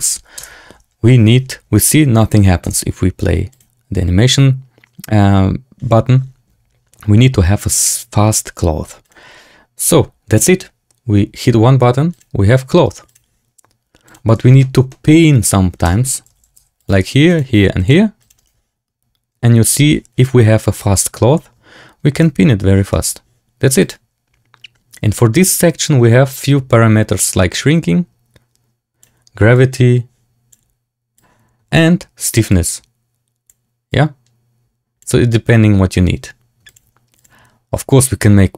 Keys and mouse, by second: 0.3 space, 2.5 space, 8.9 click, 12.0 click, 13.0 click, 14.5 shift+drag, 14.8 middle drag, 15.8 Tab, 16.2 a, 16.4 a, 16.5 c, 22.9 Tab, 23.8 click, 26.7-29.0 drag, 29.7 click, 31.2 click, 32.5-33.6 drag, 33.9-35.1 drag.